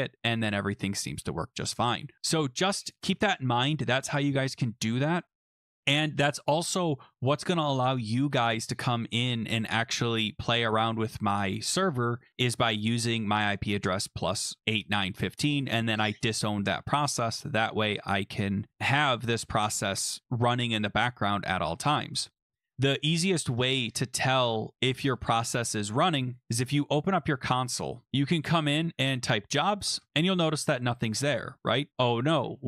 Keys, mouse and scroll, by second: 0.4 click, 2.9 click, 7.0 click, 7.7-9.1 scroll, 9.8 scroll, 12.8 click, 12.9 click, 25.1 click, 26.4 click, 27.2 click, 28.8-30.5 typing, 31.9 scroll down 12.